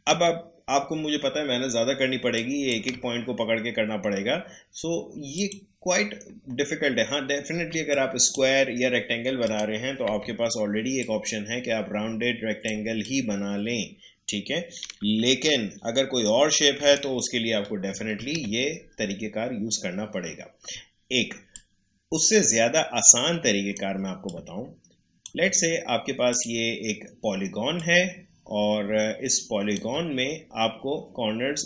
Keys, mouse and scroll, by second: 2.3 ctrl+click, 5.3 click, 7.7 space, 7.9 click, 8.2 space, 9.4 click, 10.0 Delete, 11.0 click, 14.8 Down, 21.5-24.2 drag, 26.3-31.6 drag.